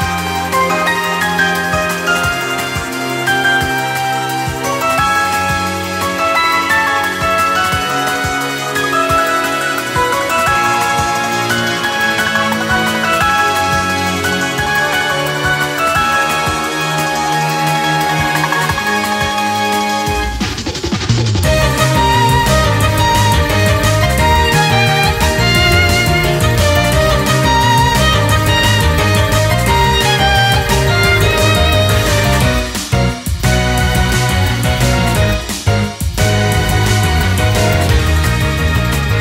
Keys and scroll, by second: 0.1 ctrl++, 0.8 ctrl+-, 3.5 ctrl+u, 3.8 ctrl+-, 5.0 typing, 7.0 typing, 9.8 typing, 11.2 ctrl+-, 12.1 typing, 14.2 ctrl+-, 14.4 ctrl+u, 14.9 typing, 15.1 ctrl+u, 16.2 typing, 17.5 ctrl+-, 18.5 ctrl+-, 18.9 ctrl+-, 19.7 ctrl+-, 20.1 ctrl+-, 20.3 ctrl+-, 20.4 ctrl++, 20.5-21.7 typing, 22.6 ctrl+-, 24.2 ctrl+-, 29.5 ctrl+t, 34.3 ctrl++, 35.0 typing, 35.5 ctrl+u, 36.4 typing.